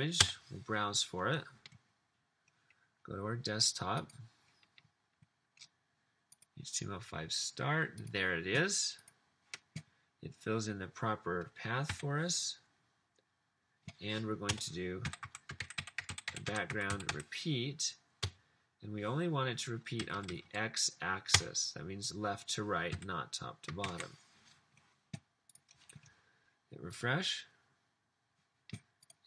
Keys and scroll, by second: 0.0-0.7 typing, 12.0 typing, 14.5 Return, 14.7-18.3 typing, 20.1 Down, 20.3 Down, 20.4 Down, 21.3 Return, 23.0 ;, 23.9 super+s.